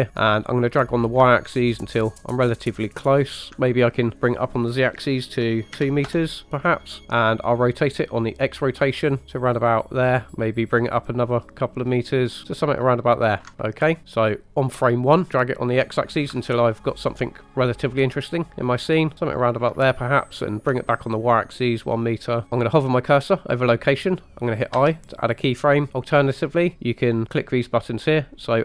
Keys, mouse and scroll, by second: 0.2-3.4 drag, 4.1-6.3 drag, 8.0-10.3 drag, 10.6-13.4 ctrl+drag, 16.2-18.4 ctrl+drag, 19.1 ctrl+click, 20.4 click, 21.4-22.4 ctrl+drag, 24.9 i.